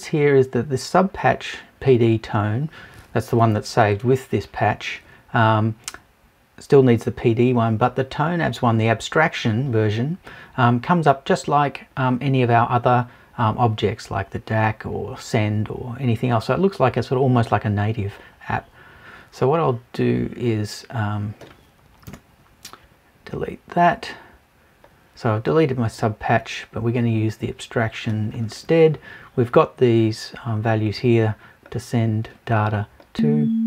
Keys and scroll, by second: 22.1 BackSpace.